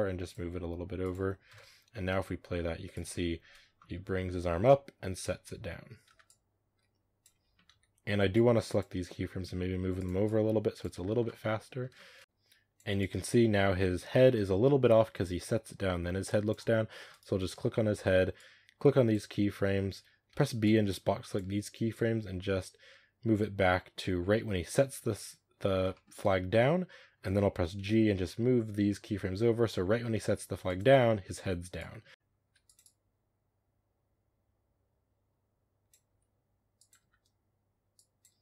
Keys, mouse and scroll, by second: 0.4 r, 1.4 KP_0, 2.0 space, 2.8-5.9 drag, 5.9 space, 6.1-7.2 drag, 7.2 a, 8.9 g, 10.1-10.8 drag, 10.8 space, 11.8-12.2 shift+middle drag, 12.2-17.0 drag, 17.0 right click, 21.8-25.3 drag, 25.8-26.1 shift+middle drag, 26.1-27.6 scroll down 1, 27.6 g, 31.6-32.1 drag, 32.1 space, 32.3 g, 32.7-35.9 drag, 35.9 g, 36.9 space.